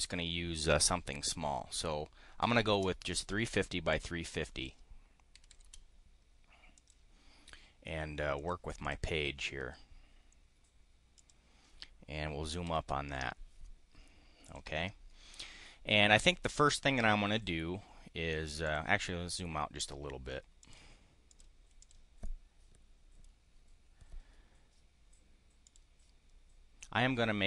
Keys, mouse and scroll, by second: 2.1-3.2 typing, 3.9 click, 4.2 click, 5.1-6.1 typing, 6.7 click, 8.3 click, 8.7 click, 9.3 click, 11.2 click, 12.6 5, 14.4 click, 18.6 click, 20.6 click, 21.2 click, 21.8 click, 22.2 click, 25.6 click.